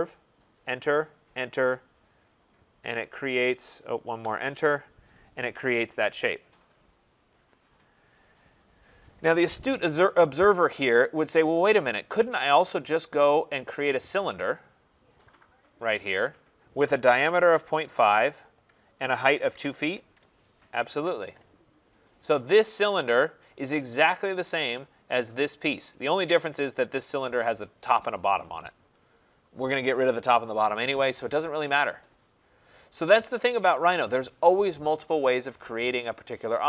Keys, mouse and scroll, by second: 0.3 Return, 1.1 Return, 2.4 click, 4.1 Return, 4.9 scroll, 7.5 middle click, 14.5 click, 15.7 click, 17.1-18.0 typing, 19.2-20.0 typing, 20.7 Return, 22.2 scroll up 4, 22.9 click, 24.5 click, 25.2-25.6 scroll, 25.8 click, 26.7 click, 32.5-33.0 scroll, 33.1 click.